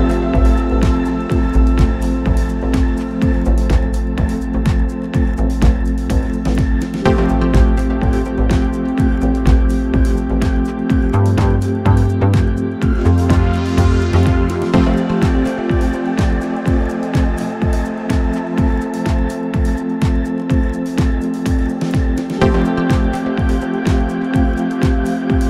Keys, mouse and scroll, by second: 5.0 t, 5.9 n, 7.1-9.0 drag, 21.6-23.4 drag, 21.7 typing.